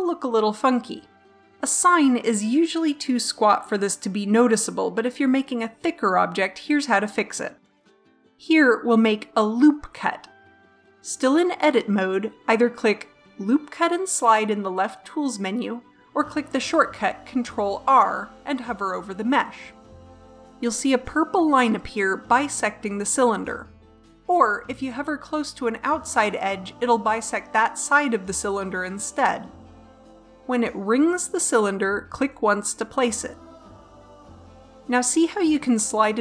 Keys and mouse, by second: 10.6 right click, 11.4 Tab, 18.4-20.0 drag.